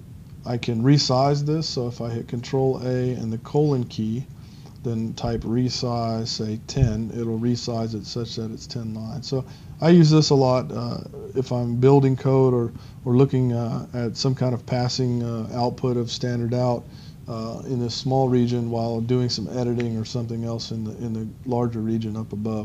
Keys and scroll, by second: 3.4 shift+;, 6.7 Return.